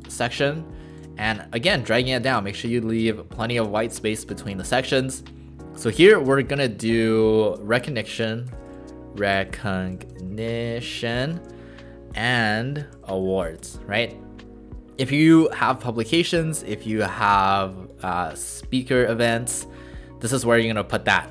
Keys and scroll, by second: 6.3 ctrl+a, 7.7-9.3 typing, 10.6-11.3 typing, 12.4 shift+7, 14.0 typing.